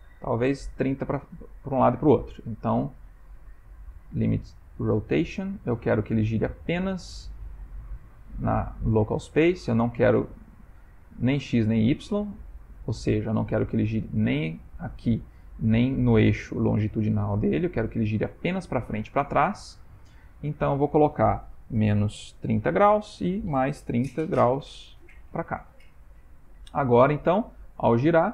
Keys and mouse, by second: 3.0 click, 7.8 click, 9.8 click, 13.1 middle click, 13.2 middle click, 15.3 middle click, 17.3 middle click, 20.2 click, 20.6 click, 26.3 ctrl+middle click, 27.0 r.